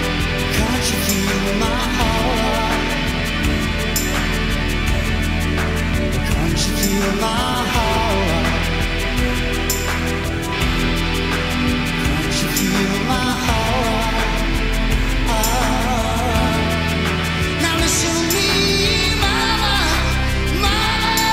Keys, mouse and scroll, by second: 0.7 r, 5.6 s, 8.1 `, 10.6 s, 13.9-21.3 shift+middle drag, 16.4 Tab, 19.0 g.